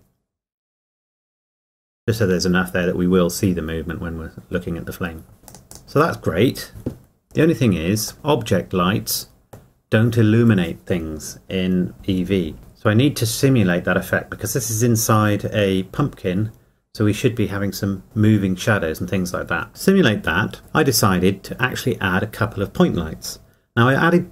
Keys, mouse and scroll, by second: 1.6 KP_Enter, 5.5 click, 8.1 middle click, 19.7 click.